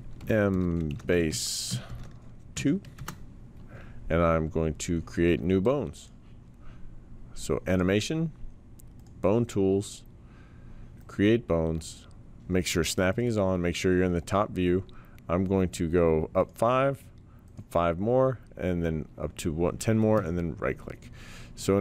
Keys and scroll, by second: 0.2-2.5 typing, 3.0 Return.